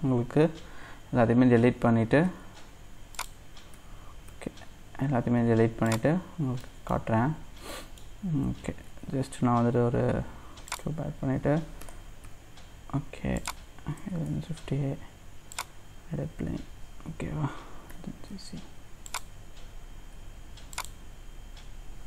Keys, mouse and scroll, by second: 1.8-2.2 scroll up 1, 2.2 x, 3.2 click, 3.7 a, 4.3 x, 5.5 x, 6.6 middle click, 7.1-7.7 scroll down 2, 7.7 middle click, 8.2-8.9 scroll down 2, 8.9 shift+a, 11.2-11.8 scroll up 1, 11.8 g, 14.2 shift+a, 17.9 g, 20.2 s.